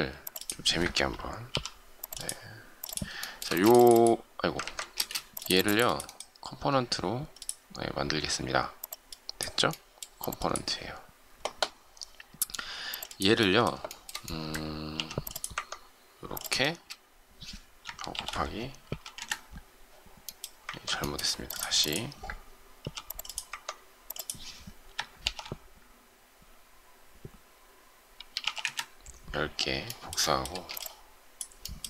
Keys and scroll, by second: 4.6 ctrl+z, 4.9 space, 14.9 shift+m, 16.6 ctrl+space, 18.1 shift+8, 18.8 5, 20.6 ctrl+z, 22.8 m, 25.2 shift+8, 28.1 1, 28.4 Return, 30.4 shift+space.